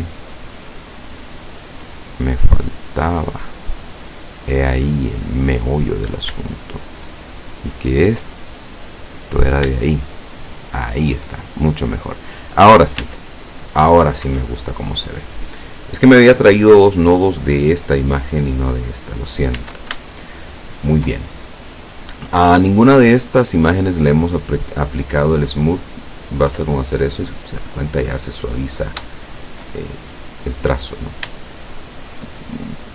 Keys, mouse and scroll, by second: 4.1 scroll up 1, 4.1 middle click, 6.0 right click, 6.7 shift+right click, 7.3-9.2 shift+drag, 9.2-9.6 scroll down 2, 9.9-11.3 shift+middle drag, 11.9 scroll down 2, 12.3 middle click, 13.1 Tab, 19.1-19.5 scroll down 2, 19.7 Tab, 20.2-21.2 shift+middle drag, 21.5-22.0 shift+scroll up 1, 22.0 scroll down 1, 26.0 click, 28.1-28.6 scroll up 1, 29.2-29.8 shift+middle drag, 29.8-30.3 shift+scroll up 1, 30.5-31.1 scroll down 4, 31.5-32.4 shift+middle drag, 32.8-32.9 middle drag.